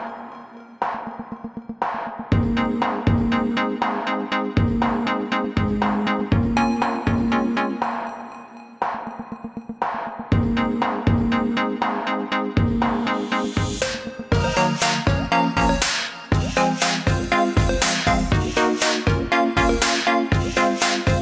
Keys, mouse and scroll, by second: 3.2 click, 13.2 click, 16.1 click, 19.3 click.